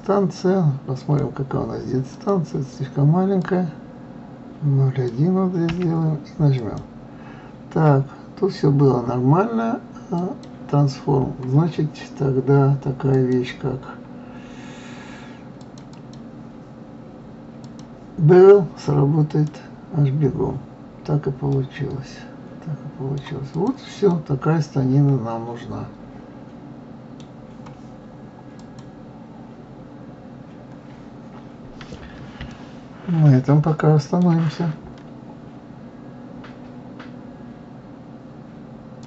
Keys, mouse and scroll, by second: 0.0 alt+m, 1.4 click, 2.6-5.5 drag, 10.6-16.2 drag, 16.3 click, 18.0-21.1 drag, 21.9-23.9 middle drag, 23.9-24.3 drag, 24.5-27.5 middle drag, 31.6-32.1 scroll down 2, 32.1-33.0 scroll up 3, 33.0-36.0 middle drag.